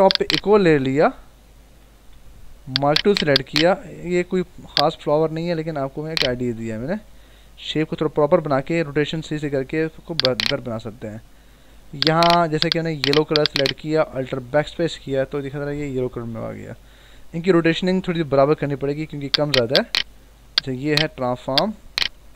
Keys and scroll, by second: 1.8 ctrl+=, 7.9 ctrl+=, 14.5 alt+BackSpace, 15.3 ctrl+d, 16.4 ctrl+-, 17.9 ctrl+-, 19.2 v, 20.3 ctrl+t.